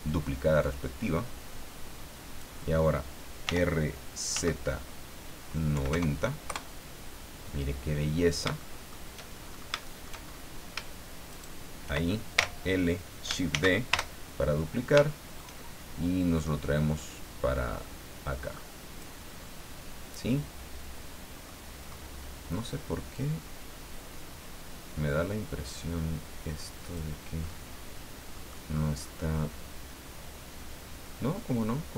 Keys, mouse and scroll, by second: 0.6-2.5 drag, 3.4 r, 4.3 z, 5.7 KP_9, 5.9 KP_0, 6.4 KP_Enter, 8.1-8.5 scroll down 3, 8.6 shift+middle click, 9.4-9.8 shift+scroll up 3, 9.8 shift+middle click, 10.2 shift+scroll up 2, 11.3 shift+right click, 12.3 l, 13.5 shift+d, 13.9 shift+Return, 14.3-14.9 shift+scroll down 3, 15.0 shift+middle click, 16.3-19.2 drag, 19.2-21.6 middle drag, 21.8-22.2 scroll up 2, 23.1-27.1 drag, 27.4 middle click, 27.5 scroll up 1, 28.7 scroll down 1, 29.3-31.9 middle drag.